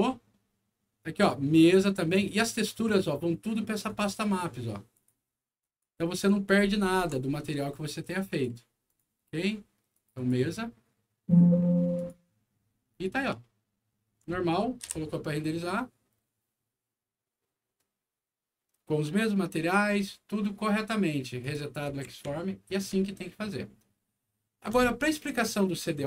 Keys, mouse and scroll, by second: 1.4 ctrl+click, 3.8 click, 4.0 click, 4.8 click, 5.5 click, 6.4-7.0 ctrl+scroll up 4, 8.2 ctrl+click, 8.8 ctrl+click, 9.8 ctrl+click, 10.1 click, 11.9 click, 12.8 click, 13.3 alt+middle click, 14.3 alt+middle click, 14.8 F9, 21.3 click, 21.8 w, 22.2 alt+middle click.